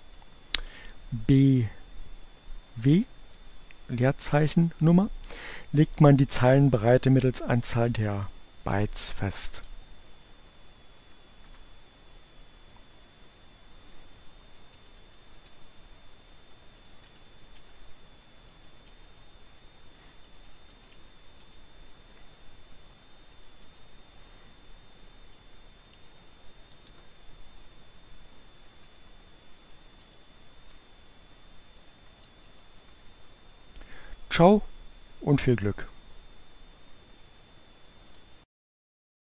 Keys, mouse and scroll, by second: 0.4 b, 8.3 Return, 9.1 Up, 9.3 Left, 10.8 s, 11.0 Return, 13.3-17.2 typing.